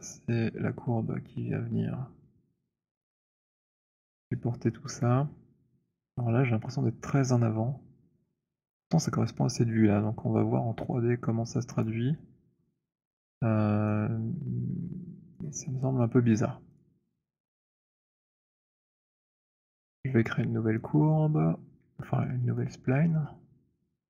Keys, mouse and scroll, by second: 11.8 alt+click, 12.3 scroll, 15.2 right click, 16.9 click, 20.1 click, 21.2 middle click, 22.1 alt+middle click.